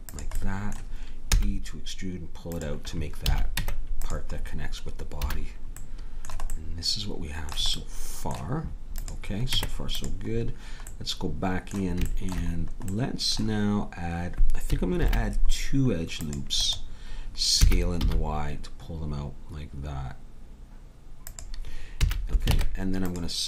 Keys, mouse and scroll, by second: 1.3 e, 3.2 a, 3.5 Tab, 5.3 a, 9.0-10.9 drag, 9.5 Tab, 10.9 middle click, 15.0 ctrl+r, 17.6 s, 22.0 a, 22.5 ctrl+Tab.